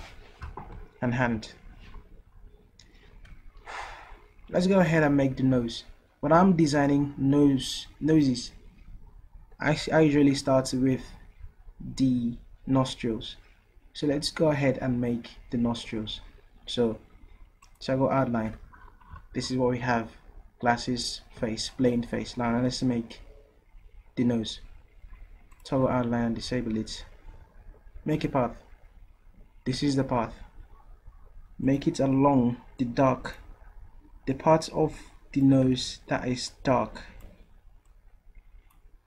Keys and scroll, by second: 35.9 ctrl+z.